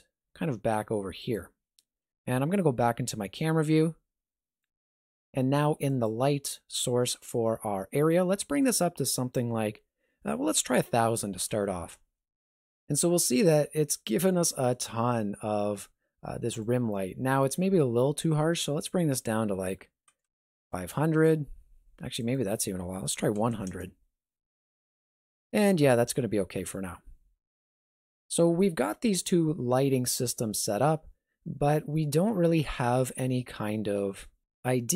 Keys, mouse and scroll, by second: 2.2 KP_0, 3.8 g, 5.9 click, 8.6 click, 11.3 KP_0, 13.6 g, 18.8 click, 20.2 KP_0, 22.2 click, 23.5 KP_0, 26.2 g.